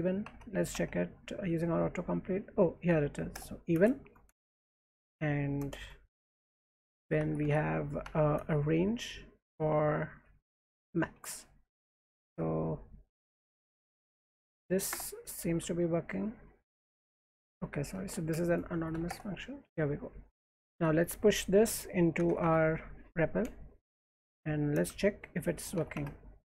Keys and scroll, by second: 0.2 Tab, 0.7 Tab, 3.3 Return, 3.7 space, 4.5 %, 5.2 Right, 5.6 Return, 5.7 Tab, 6.2-8.4 typing, 8.0 Tab, 9.4-11.7 typing, 13.6-15.4 typing, 14.9 Return, 17.1-22.8 typing, 23.9 alt+Left, 24.9-26.4 typing.